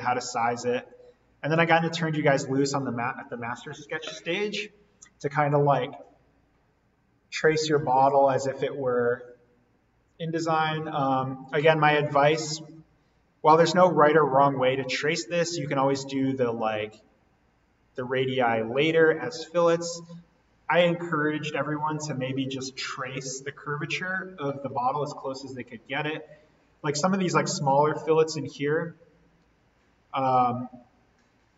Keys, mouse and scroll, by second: 0.7 right click, 1.6 click, 11.1-11.8 scroll down 1, 16.5-17.0 scroll up 1, 17.0-18.4 scroll down 1, 19.5-21.9 scroll up 1, 21.9-24.1 scroll down 1, 25.6-26.1 scroll down 1, 28.4-29.3 scroll up 1.